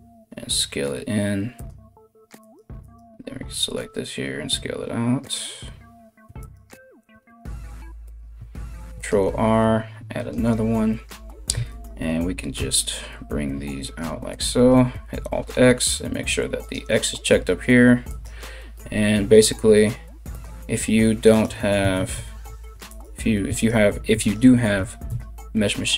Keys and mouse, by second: 2.0 alt+right click, 2.3 alt+middle click, 2.4 alt+right click, 2.5-6.0 alt+middle drag, 3.0 alt+s, 6.0 alt+right click, 6.3-18.3 alt+middle drag, 6.7 g, 8.3 ctrl+r, 11.1 1, 11.3-21.0 right drag, 12.2 g, 14.6 alt+x, 16.2 click, 18.3 g, 21.0-22.5 middle drag, 21.5 ctrl+z, 22.5 alt+right click, 22.8 alt+middle click, 23.1 alt+right click, 23.4 alt+middle click, 23.8 alt+right click, 24.1-25.9 alt+middle drag, 24.4 g.